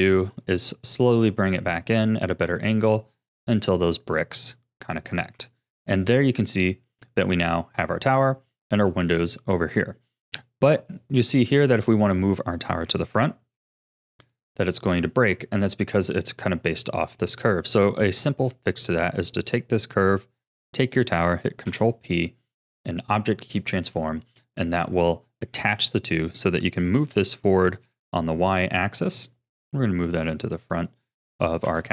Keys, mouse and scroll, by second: 1.7 s, 5.3 a, 5.9-6.3 scroll down 4, 6.3-10.5 middle drag, 10.5-10.8 scroll up 1, 10.8-11.9 middle drag, 11.9 click, 13.0 g, 16.5-17.5 middle drag, 17.5-18.2 scroll up 1, 18.2-19.4 middle drag, 19.4 click, 20.6 shift+click, 21.6 ctrl+p, 24.0-25.0 middle drag, 25.0-25.3 scroll down 2, 25.3-25.9 shift+middle drag, 25.9 click, 26.9 g, 31.6 KP_7.